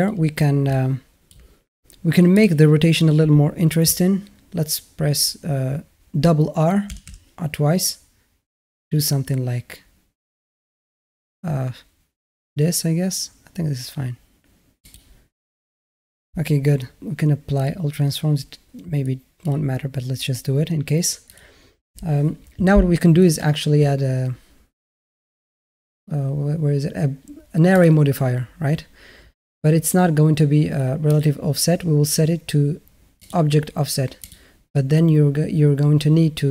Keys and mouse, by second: 0.5-1.1 alt+middle drag, 2.2 click, 6.7 r, 17.3 ctrl+a, 23.3-27.8 drag, 33.1 drag, 34.0 click.